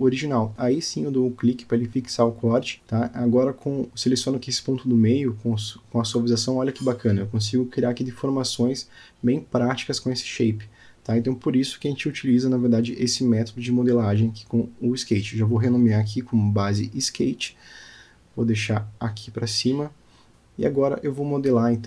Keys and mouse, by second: 0.1-0.4 middle drag, 0.6 click, 2.0 click, 3.1 click, 3.6 click, 4.0-4.7 middle drag, 4.9 click, 5.0 Tab, 5.4 middle click, 6.1 alt+click, 7.7 o, 9.3 g, 13.8 click, 14.4 Tab, 15.0-15.3 middle drag, 16.2 click, 17.1-21.2 drag.